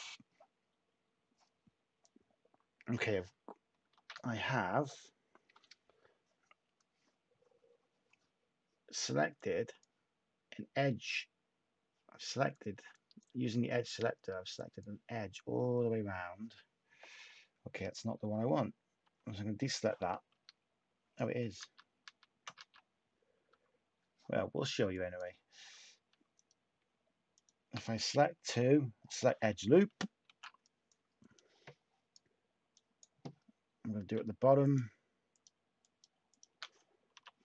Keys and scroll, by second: 3.9 a, 19.0 /, 20.3 Tab, 21.5 ctrl+z, 22.0 ctrl+z, 22.5-23.4 typing, 28.4 u, 30.2 shift+a, 37.1 u.